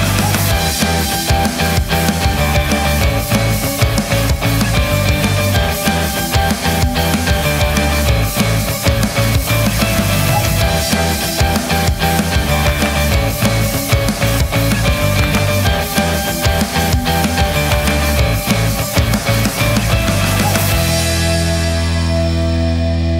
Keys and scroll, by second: 5.7 Delete.